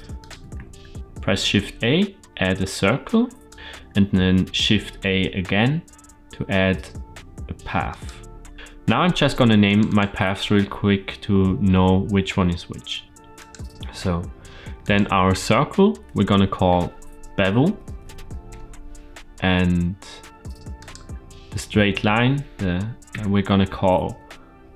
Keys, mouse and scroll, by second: 0.0 click, 0.4 shift+a, 3.5 click, 5.3 shift+a, 8.5 click, 9.5 click, 9.7-13.0 drag, 13.2 click, 14.6 click, 16.4 F2, 20.6 click, 22.9 F2.